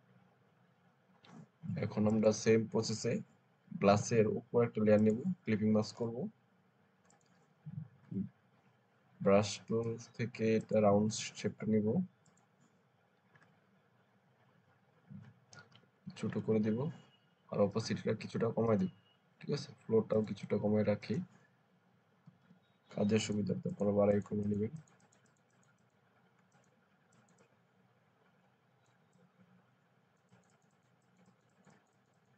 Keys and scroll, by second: 8.0 b, 15.6 alt+[, 15.8 alt+[, 16.0 alt+[, 16.2 alt+[, 16.3 alt+[, 16.5 alt+[, 16.8 alt+[, 22.2 ], 22.3 ].